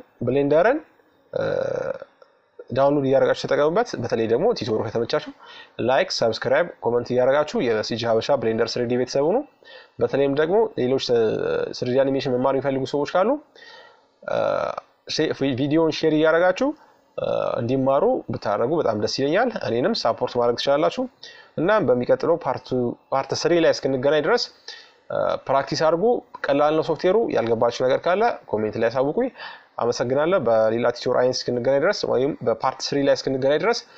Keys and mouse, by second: 4.1-7.8 middle drag, 9.7-11.4 drag, 11.8-14.5 middle drag, 15.2-17.9 middle drag, 18.8-22.8 middle drag, 27.8-29.7 middle drag, 32.1 middle click.